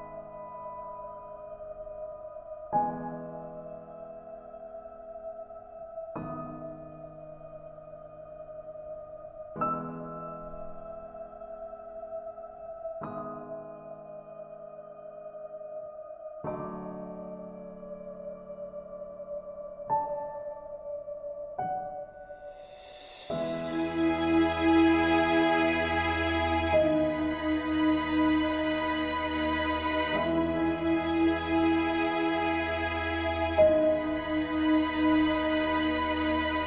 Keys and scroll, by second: 14.5 ctrl+a, 17.8 ctrl+d.